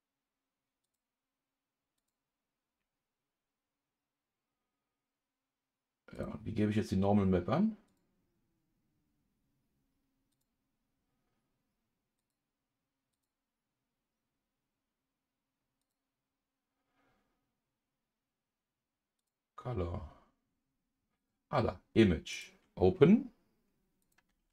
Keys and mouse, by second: 2.0-7.2 drag, 7.9-10.4 drag, 12.2-15.9 drag, 19.2-22.0 drag, 22.3 click.